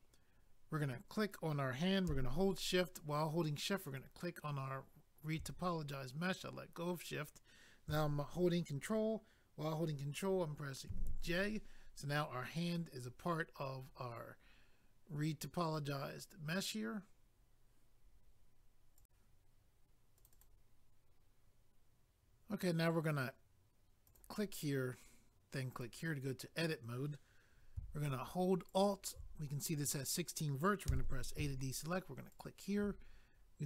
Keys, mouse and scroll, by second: 0.8 click, 0.9 click, 3.9 shift+click, 19.0 click, 20.2 click, 20.2 click, 20.3 click, 20.4 click, 24.0 click, 24.2 click, 25.7 click, 25.8 click, 28.6 alt+click, 32.3 alt+click.